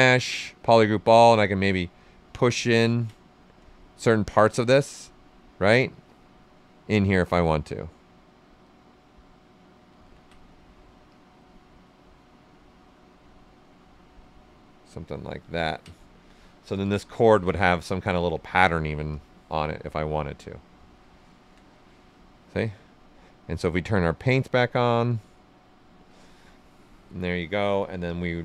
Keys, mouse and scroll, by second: 1.2-2.8 drag, 2.8 ctrl+z, 3.6 space, 5.1 space, 6.4-8.6 ctrl+right drag, 8.6-10.0 drag, 10.0 ctrl+z, 11.0-15.0 drag, 15.0 ctrl+right click, 15.9 alt+right click, 16.7 d, 17.2 shift+f, 17.6 ctrl+right click, 19.1 click, 20.2 right click, 23.7 click, 28.0-28.4 drag.